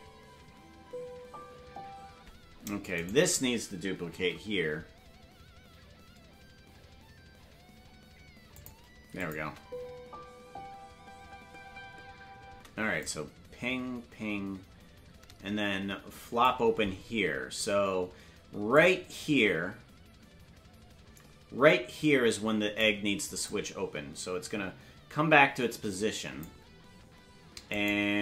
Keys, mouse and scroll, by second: 3.0 right click, 3.0 space, 4.1 shift+d, 9.2 click, 9.4 space, 12.5 space, 13.0-16.4 drag, 18.7-22.8 drag, 23.4-26.4 drag, 27.7 right click.